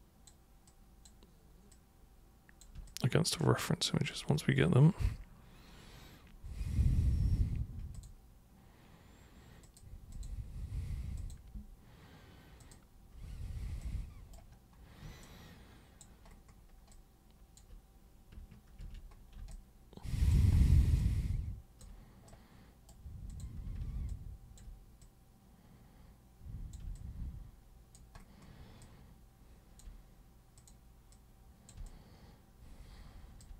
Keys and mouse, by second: 0.7-1.0 super+drag, 1.7 super+click, 2.9-4.0 alt+super+drag, 8.0 super+click, 8.0-9.8 super+right drag, 9.6 super+click, 10.1 super+click, 10.2 super+right click, 11.2 super+click, 12.6 super+click, 13.8 super+right click, 15.2 alt+super+click, 16.9 alt+super+click, 18.8 ctrl+super+1, 19.5 alt+super+click, 21.0 alt+super+click, 22.3 super+right click, 23.3 super+click, 23.7 super+w, 24.1-24.6 alt+super+drag, 25.0 super+click, 26.9-27.9 alt+super+drag, 28.8-29.8 alt+super+drag, 30.6 super+click, 31.1 super+click, 31.9-33.4 alt+super+drag.